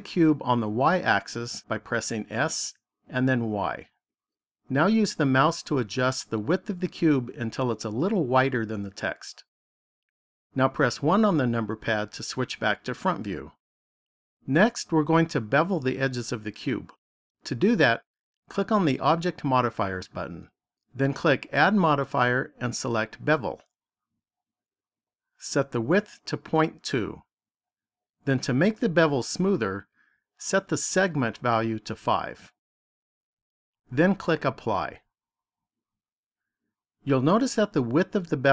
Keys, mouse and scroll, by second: 2.1 s, 8.5 click, 11.2 KP_1, 19.0 click, 21.3 click, 26.0 click, 30.8 click, 35.3 click.